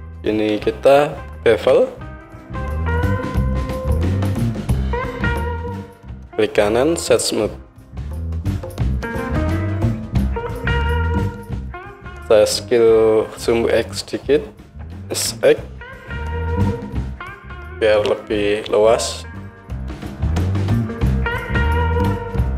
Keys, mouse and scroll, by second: 1.5 ctrl+b, 4.5 Tab, 5.7-22.5 right drag, 14.9 s.